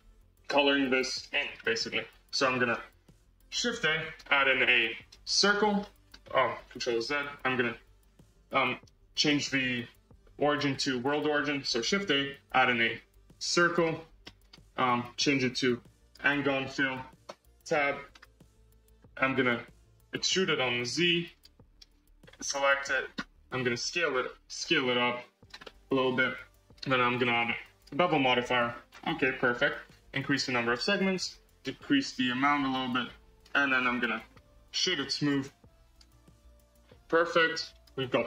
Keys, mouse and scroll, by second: 1.3 space, 1.5-3.0 middle drag, 3.0 scroll down 1, 3.3 shift+a, 5.7-6.9 middle drag, 6.9 ctrl+z, 8.0 shift+a, 9.3 shift+s, 9.9 shift+s, 11.6 shift+a, 14.1 scroll, 14.2-15.2 middle drag, 15.2-16.3 drag, 16.3-17.2 middle drag, 17.2 Tab, 17.6-20.0 middle drag, 20.1 e, 22.1 a, 22.7 Tab, 23.7 d, 24.5 s, 25.6-26.6 middle drag, 26.6-28.0 drag, 28.0 scroll up 4, 28.3 shift+middle click, 28.8-29.1 scroll up 5, 29.1-30.5 shift+middle drag, 30.5-33.7 drag, 33.7-34.1 scroll down 3, 34.1 middle click, 35.0-37.5 right drag, 37.5-38.2 drag.